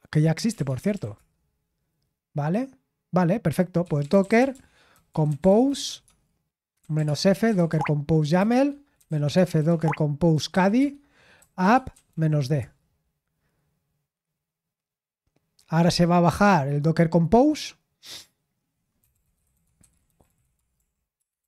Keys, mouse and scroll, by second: 0.2-1.5 typing, 3.5-12.5 typing, 19.5-21.4 typing.